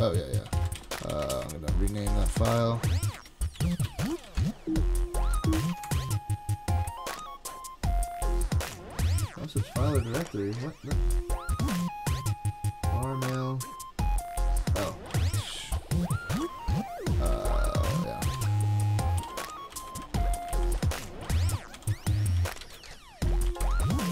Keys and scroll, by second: 0.2-5.9 typing, 15.1 ctrl+c, 17.3 super+Tab, 18.9-19.7 typing, 19.9 alt+Left, 20.0 alt+Left, 22.6 shift+super+Right, 23.5 super+c, 23.6 super+Tab.